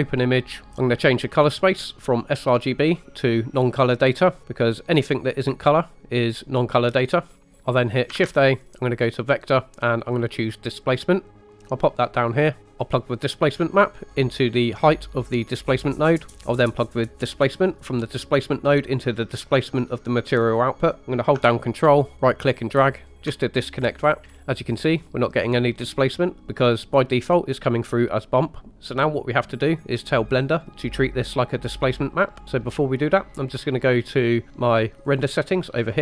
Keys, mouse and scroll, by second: 0.7 ctrl+z, 0.7-1.2 scroll down 2, 2.5-5.0 drag, 7.3 scroll down 3, 7.4 middle click, 8.1 shift+a, 12.3 click, 12.4 typing, 12.6 middle click, 13.2 click, 15.5 click, 16.3 right click, 17.8-19.9 drag, 21.0 click, 21.0 typing, 22.2 ctrl+right click, 24.2 scroll up 2, 24.8-25.6 middle drag, 35.0 click.